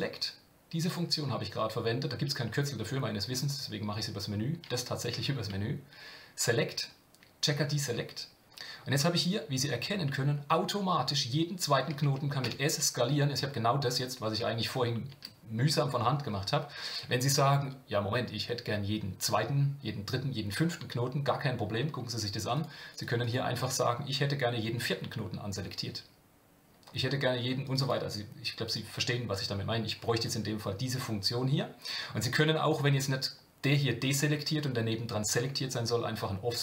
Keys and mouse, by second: 22.5 click, 23.0 click, 27.6 click, 27.8 click.